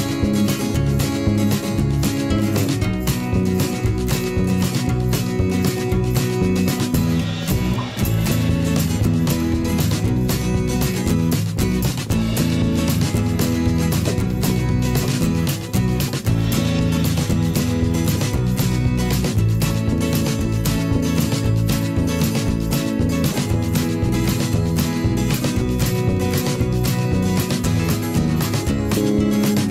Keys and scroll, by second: 20.6 Delete.